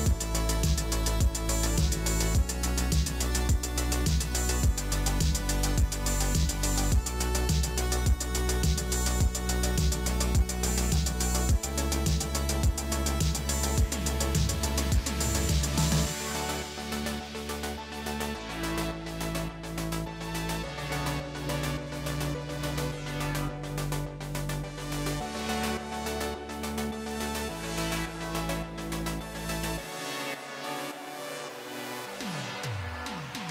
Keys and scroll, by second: 0.5 alt+shift+BackSpace, 1.1 space, 1.9 space, 10.8 ctrl+j, 15.3 alt+shift+BackSpace, 21.7 space, 23.4 space, 26.1 space, 27.5 ctrl+t, 28.0 space, 32.0 space, 32.8 ctrl+l.